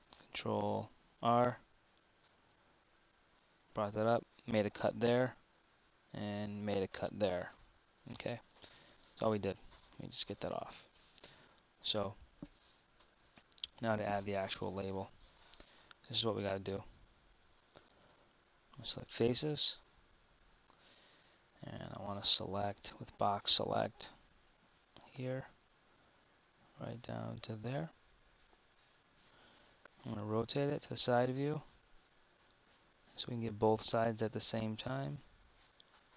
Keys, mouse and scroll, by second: 0.9 ctrl+r, 8.8 a, 10.0 z, 10.6 z, 11.5 Tab, 13.2 a, 14.6 Tab, 15.4 z, 20.7 KP_1, 22.8 b, 29.8 KP_3, 34.2 b.